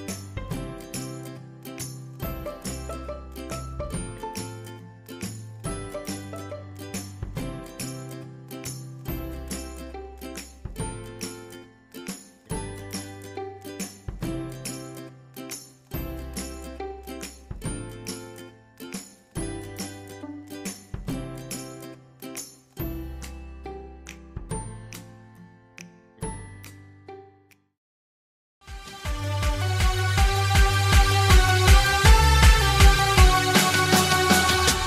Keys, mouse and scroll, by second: 1.9 click, 6.1 shift+F2, 8.5 F9.